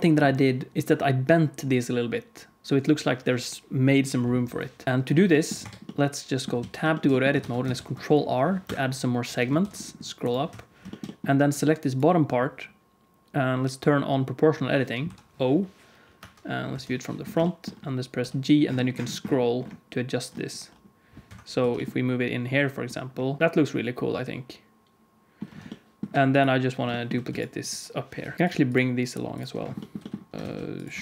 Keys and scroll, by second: 5.5 Tab, 6.5 alt+z, 7.4 ctrl+s, 7.7 ctrl+r, 9.5 ctrl+r, 15.0 o, 16.1 KP_1, 16.4 KP_3, 16.6 KP_1, 18.1 g, 21.5 g, 23.4 Tab, 23.4 alt+z, 27.2 x, 28.1 KP_1, 28.3 KP_3, 29.9 g, 30.3 ctrl+s, 30.3 KP_3, 30.4 shift+d.